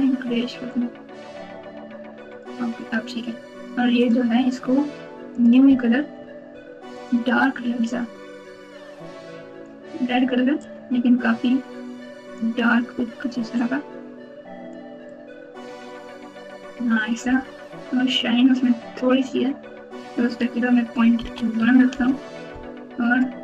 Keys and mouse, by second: 2.3 click, 5.3 click, 6.9 click, 20.2-21.9 drag.